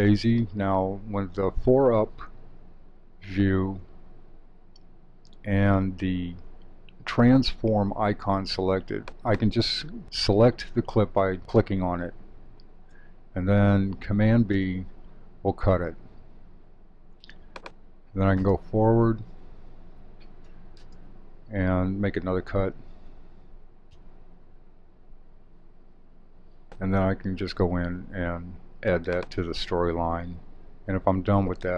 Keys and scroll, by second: 14.5 super+b, 23.9 super+b, 27.5 alt+super+Down.